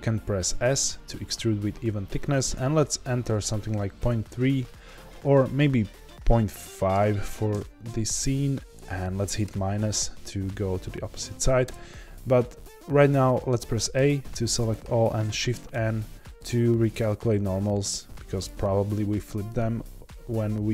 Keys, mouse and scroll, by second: 11.6 Return, 13.1 middle click, 13.9 a, 15.7 shift+n.